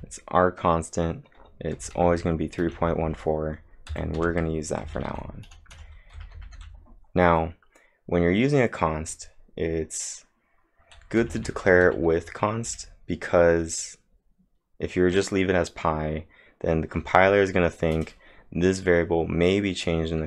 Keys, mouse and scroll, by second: 1.8 h, 11.2 typing.